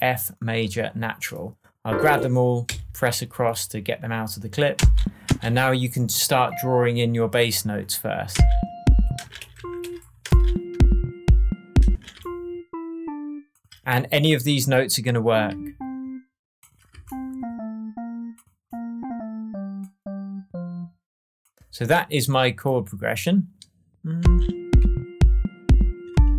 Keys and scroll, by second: 2.6 Left, 4.7 space, 8.3 space, 9.4 shift+space, 9.5 shift+Down, 10.2 shift+space, 10.8 space, 11.8 space, 24.1 space.